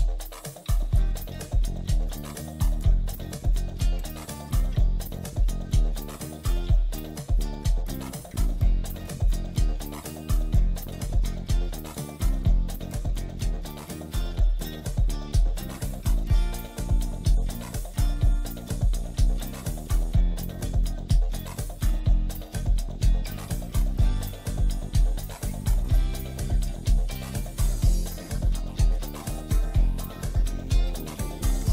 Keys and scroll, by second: 2.7 space, 3.1 F3, 6.4 Escape, 9.9-12.3 typing, 11.8 F3, 14.1-15.0 typing, 15.0 shift+F2, 15.3 Escape, 16.2 alt+c, 16.3 alt+w, 18.3 F4, 19.9-20.7 typing, 20.8 Escape, 21.9 shift+Page_Down, 22.6 Escape, 24.2 F2, 30.1 space.